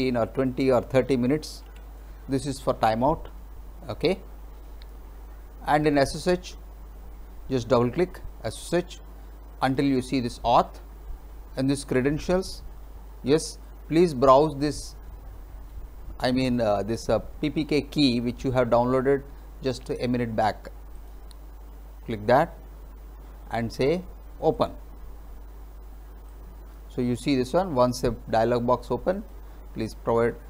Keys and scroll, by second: 1.3-2.2 typing.